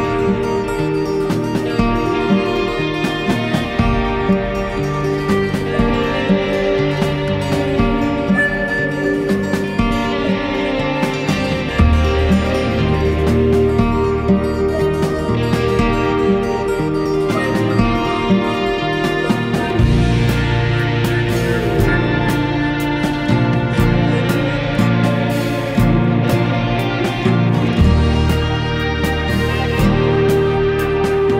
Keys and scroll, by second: 8.8 ctrl+a, 10.0 ctrl+0, 25.4 ctrl+=.